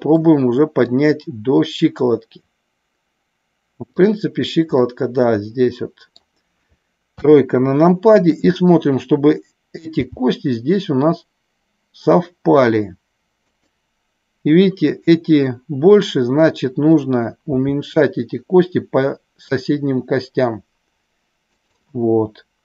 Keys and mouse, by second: 0.9-3.9 drag, 4.8-6.2 middle drag, 7.1 KP_3, 9.9 g, 13.4 click, 17.5 s, 21.5 click.